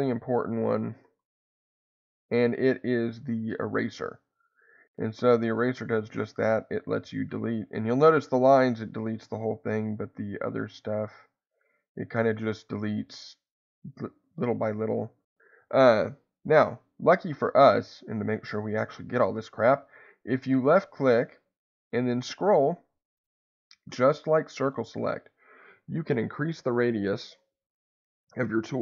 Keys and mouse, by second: 2.0-3.5 drag, 5.4-8.0 drag, 8.2-9.4 drag, 9.6-15.3 drag, 20.3-28.3 drag, 28.6-28.8 drag.